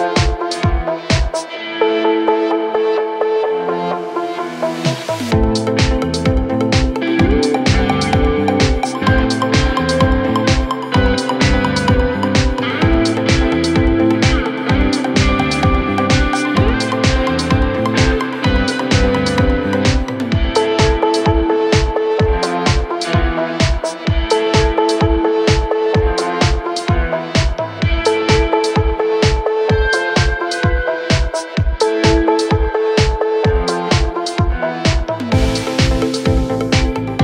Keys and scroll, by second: 5.4 F9, 13.1 ctrl+z, 13.1 Escape, 15.4-18.0 typing, 20.0 space, 29.8 ctrl+q, 30.9 shift+F2.